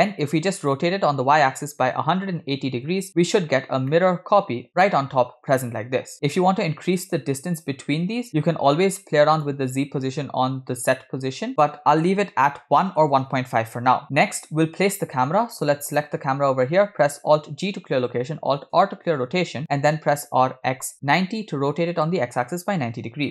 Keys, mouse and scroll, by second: 0.0 middle click, 0.0-0.5 scroll up 5, 0.7-2.9 drag, 4.0 middle click, 5.9 scroll up 3, 6.1-7.2 middle drag, 8.3-8.8 middle drag, 9.5-13.1 shift+drag, 14.0-15.3 middle drag, 14.0 scroll down 2, 15.9 click, 17.6 alt+g, 19.0 alt+r, 20.3 r.